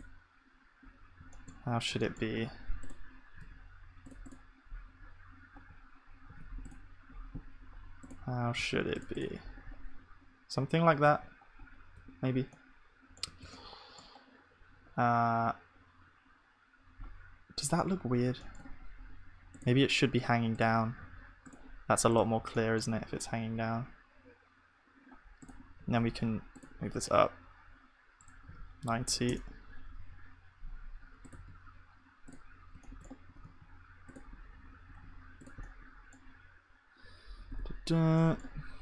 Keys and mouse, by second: 1.3 click, 6.3 ctrl+z, 6.9-8.9 drag, 8.2 g, 9.2 click, 9.7 g, 11.1 ctrl+s, 15.4-17.7 middle drag, 25.9-38.8 drag, 25.9 shift+d.